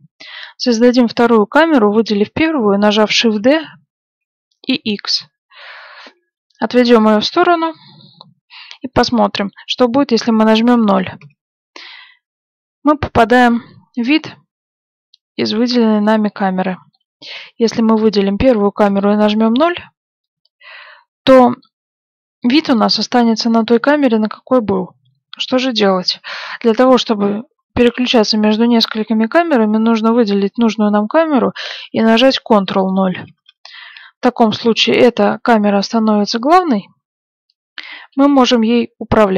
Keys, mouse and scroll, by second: 0.1-1.8 right drag, 3.2 shift+d, 8.8-10.6 middle drag, 11.1 KP_0, 15.2-18.6 middle drag, 18.0-19.8 right drag, 18.8 KP_0, 26.0-26.6 scroll down 1, 26.6-30.3 middle drag, 30.3-32.1 right drag, 30.3 middle click, 33.2 ctrl+KP_0, 34.8-35.8 scroll up 1, 35.8-37.0 middle drag, 36.1 shift+f, 38.6-39.3 middle drag.